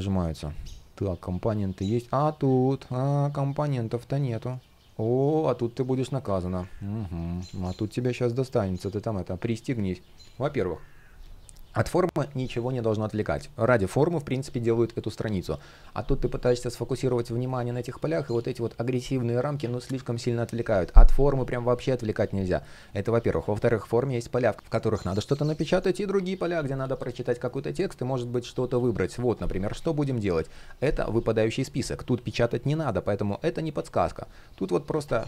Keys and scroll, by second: 3.2 shift+o, 4.2 shift+o, 7.2 shift+o.